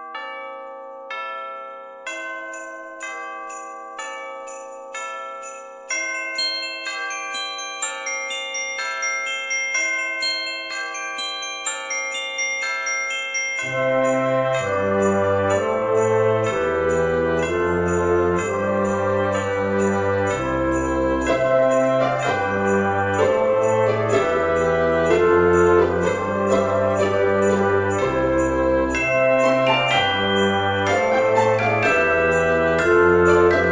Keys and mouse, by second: 0.7 click, 1.4 KP_0, 1.6 KP_Decimal, 1.9 KP_0, 2.3 KP_2, 4.0 click, 4.6 KP_4, 6.8 shift+a, 10.7 click, 11.7 g, 12.0 z, 12.8 click, 14.0 KP_3, 15.0 r, 15.5 KP_9, 16.2 Return, 16.2 KP_Enter, 16.9 KP_1, 17.8 shift+middle click, 18.5 s, 19.7 click, 20.0 g, 21.3 click, 21.5 shift+middle click, 22.3 Tab, 23.4 click, 25.6 g, 25.9 x, 28.0 click, 28.5 r, 30.0 click, 30.2 g, 30.4 z, 31.6 click, 32.6 g, 32.7 z.